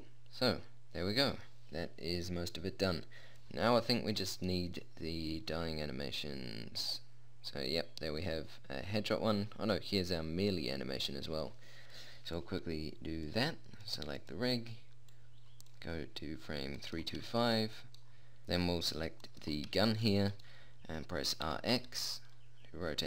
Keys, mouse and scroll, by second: 1.5 middle click, 4.1 middle click, 6.6-7.9 middle drag, 12.8-14.5 drag, 14.3 right click, 14.5 middle click, 18.5-19.7 middle drag, 19.7 right click, 21.9 r, 22.7 middle click.